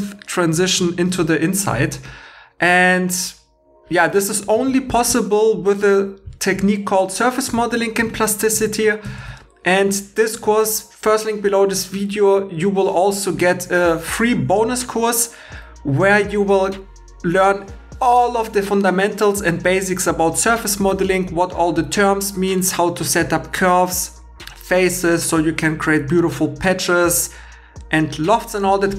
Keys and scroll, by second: 4.5 super+Tab, 9.2 super+Tab.